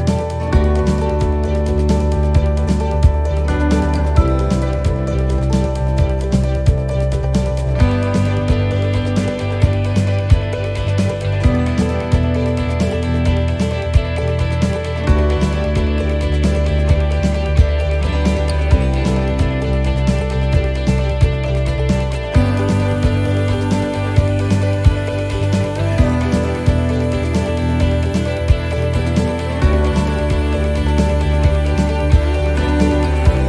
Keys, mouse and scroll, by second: 1.4 middle click, 2.7 click, 4.6 middle click, 6.8 middle click, 6.8-7.7 scroll up 1, 8.1 click, 9.6 right click, 10.6 shift+right click, 11.1 shift+right click, 12.3 shift+right click, 12.3 click, 17.4 middle click, 18.0-18.4 scroll down 2, 18.6 shift+middle click, 19.0-19.3 scroll up 2, 20.1 middle click, 22.3 right click, 22.8 shift+right click, 25.3 shift+right click, 33.2 shift+middle click.